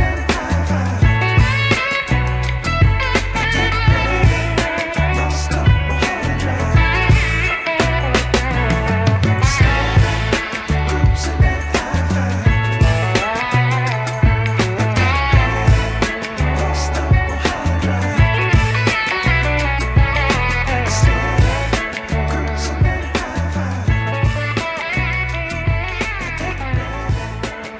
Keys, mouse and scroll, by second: 2.0 Tab, 2.4-2.8 scroll up 2, 2.8 shift+middle click, 3.6 click, 4.4 click, 7.3 shift+click, 8.4 s, 20.3 Tab, 23.8-25.1 drag, 26.1-26.6 drag, 27.2 Tab.